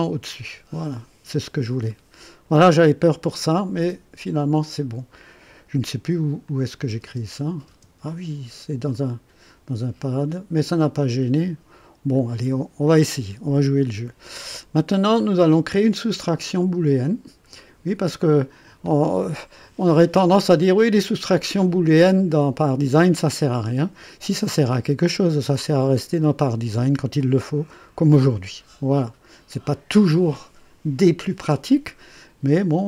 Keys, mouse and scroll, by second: 1.4-2.7 drag, 3.7 click, 6.4 click, 7.0 space, 7.6 space, 8.9 click, 12.1 click, 12.8-15.0 drag, 15.2 click, 17.5 click, 19.3-21.1 drag, 31.7-32.7 drag.